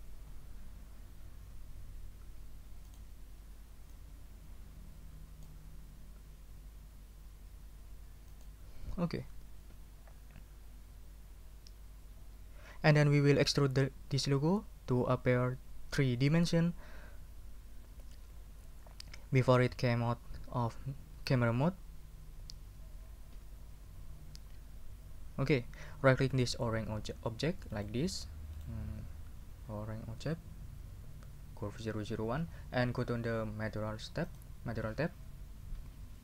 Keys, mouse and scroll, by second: 2.2 s, 2.8 click, 3.9 click, 4.0-5.6 middle drag, 6.1 s, 8.3 click, 23.3 o, 27.7 right click, 28.5 right click, 29.3 scroll up 1, 34.3 middle click, 36.1 scroll down 2.